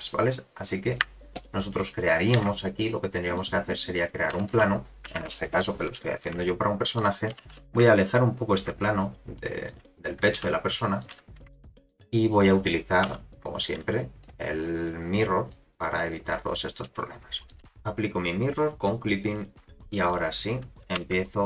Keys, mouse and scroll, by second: 0.0-1.0 scroll down 1, 1.3 shift+right click, 2.4 shift+a, 4.3 r, 6.3 middle click, 7.3 g, 9.6 click, 10.4 s, 11.5 Tab, 11.9 ctrl+r, 13.1 1, 13.6 click, 14.6 click, 15.5 click, 16.1 click, 17.5 click, 17.6 Tab, 17.6 shift+middle click, 17.6 x, 19.2 click, 19.7 Tab, 19.7 scroll up 1, 19.8 2, 20.1 click, 21.0 1, 21.2 click.